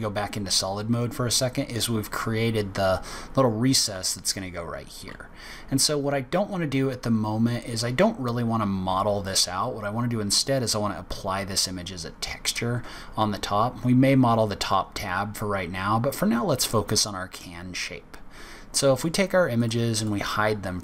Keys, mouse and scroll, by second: 3.9 z, 12.1-12.5 scroll down 4, 12.5-14.7 scroll up 3, 14.7-15.7 scroll down 5, 16.6 middle click, 17.9-18.3 scroll up 3, 18.3-19.5 scroll down 1, 19.5 click, 19.5 scroll down 1, 19.9 click, 20.5 scroll up 1.